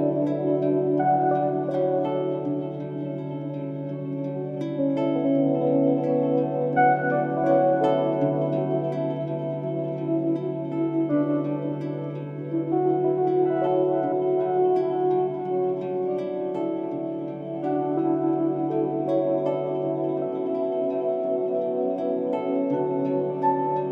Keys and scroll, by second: 0.8 ctrl+i, 5.5 ctrl+i, 8.6 ctrl+s, 9.0 ctrl+z, 9.0 ctrl+alt+g, 9.2 ctrl+z, 10.1 ctrl+z, 11.0 ctrl+z, 11.6 ctrl+z, 13.9 ctrl+z, 18.8 ctrl+z, 19.6 ctrl+z, 22.6 ctrl+z.